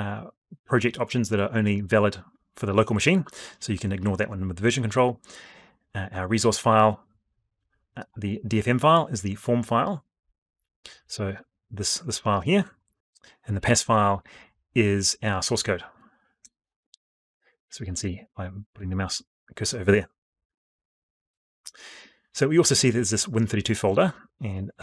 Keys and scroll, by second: 16.1 F12, 20.3 alt+Tab.